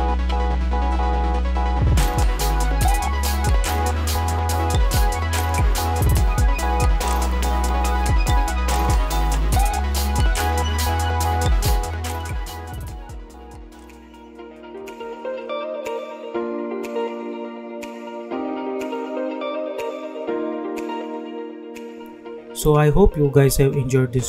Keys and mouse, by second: 14.0 space.